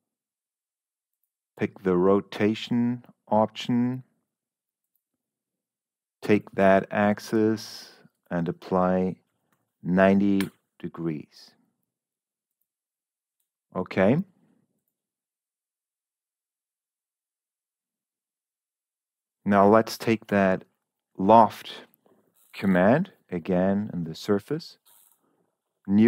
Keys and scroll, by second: 9.4 0, 10.3 Return.